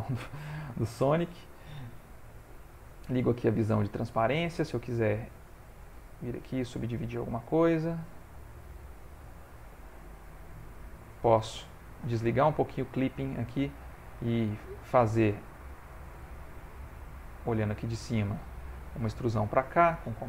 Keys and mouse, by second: 0.0 ctrl+middle click, 2.6 click, 3.7 click, 4.1 g, 5.4 shift+click, 5.9 right click, 6.9 click, 7.3 g, 9.6 click, 10.0 middle click, 11.1 middle click, 12.8 click, 13.3 middle click, 15.7 click, 17.4 click, 18.5 e.